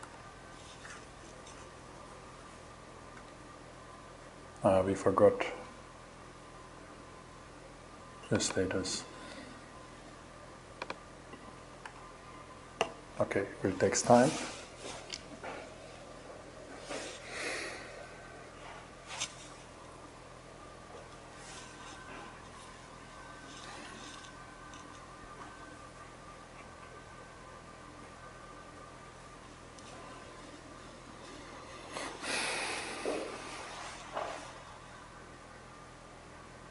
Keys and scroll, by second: 0.1 shift+Return, 11.3 shift+Return.